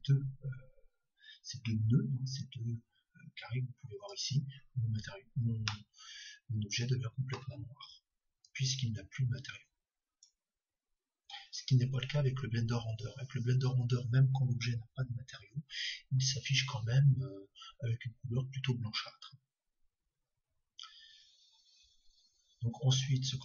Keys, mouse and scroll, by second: 5.7-8.5 middle drag, 8.5-18.1 drag.